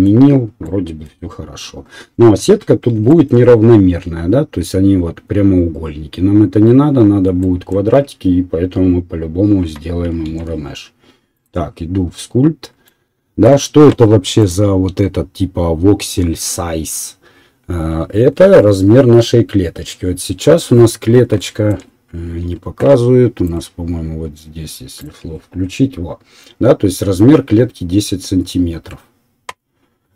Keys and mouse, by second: 2.2 KP_1, 3.6-6.4 drag, 10.2-11.9 right drag, 10.2 shift+z.